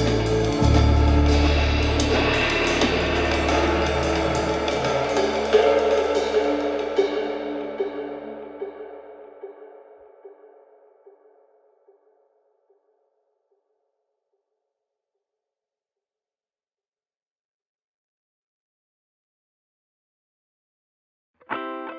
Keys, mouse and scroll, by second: 0.0-1.0 shift+middle drag, 1.1 KP_7, 1.3-1.8 scroll up 5, 1.8 click, 2.6 click, 3.9 scroll down 1, 4.1-4.4 middle drag, 4.4 click, 4.6 scroll down 1, 4.8-5.6 shift+middle drag, 5.6 scroll up 1, 5.8-6.7 shift+middle drag, 6.7 scroll up 1, 6.9 click, 7.7 shift+click, 8.1 KP_7, 8.5 scroll down 1, 8.7 shift+middle click, 9.2 shift+d, 10.8 scroll down 1, 11.0-11.3 middle drag, 11.3 drag, 11.5 scroll up 1, 11.7 click, 11.9 KP_7, 12.4 g, 13.2 click, 13.6 g, 14.4 scroll up 1, 14.8 click, 15.0 g, 15.8 click, 16.6 shift+d, 18.0-18.6 scroll up 3, 18.2 shift+middle click, 18.6-19.1 shift+middle drag, 19.1 r, 20.9 scroll down 1, 21.1-21.4 shift+middle drag, 21.4 drag, 21.7 click.